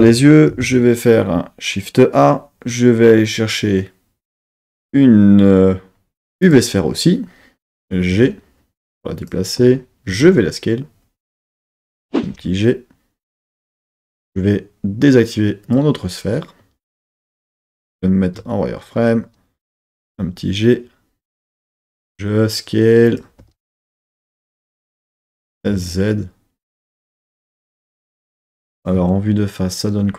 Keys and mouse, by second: 0.5 shift+a, 9.1 click, 9.1 g, 10.1 s, 11.3-12.1 drag, 12.1 g, 13.8-14.3 drag, 15.6-17.7 drag, 17.7 z, 19.9 g, 21.6 click, 21.9 s, 23.1 click, 23.3 g, 24.6 click, 25.3 s, 25.7 z, 27.2 drag, 27.5 g, 28.3 click, 28.9 KP_1.